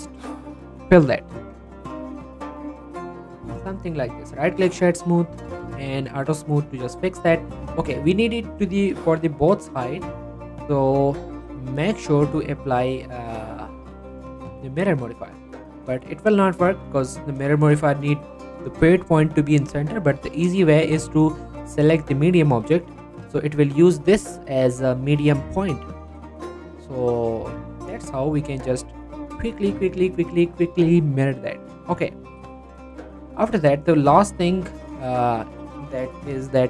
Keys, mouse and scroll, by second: 0.0 right click, 1.0 f, 1.3 middle click, 1.6 g, 1.9 y, 2.3 x, 2.8 click, 3.0 Tab, 3.1 scroll down 1, 3.3 middle click, 4.2 right click, 4.5 click, 6.1 scroll up 1, 6.4 click, 6.5 shift+middle click, 6.7 scroll up 1, 6.9 middle click, 7.2 click, 7.4 scroll down 1, 7.6 middle click, 8.3 scroll down 1, 8.5 scroll up 1, 8.8 s, 9.4 click, 9.7 middle click, 10.0 scroll down 1, 10.2 middle click, 11.7 click, 14.1 right click, 15.1 click, 15.5 middle click, 16.6 scroll up 1, 16.7 middle click, 17.2 scroll down 1, 17.5 shift+middle click, 17.7 scroll up 1, 19.2 scroll down 1, 20.1 shift+middle click, 20.3-20.7 scroll up 1, 21.4 click, 23.3-23.7 scroll up 1, 23.7 click, 24.2 g, 24.5 right click, 24.7 middle click, 26.5-26.9 scroll down 1, 26.9 click, 27.6 middle click, 27.7-28.1 scroll up 1, 28.8 click, 29.4 scroll down 1, 30.6 click, 31.6 scroll down 1, 31.8 middle click, 32.3-32.9 scroll down 1, 33.4 scroll down 1, 33.6 middle click, 33.9-34.5 scroll up 1, 34.7 shift+middle click, 35.8 click.